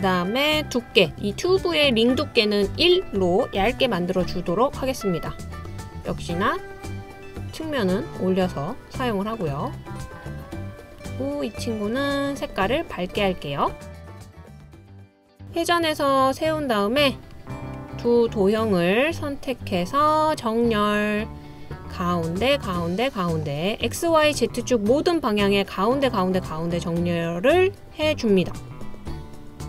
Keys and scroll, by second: 2.7 typing, 3.6 Return.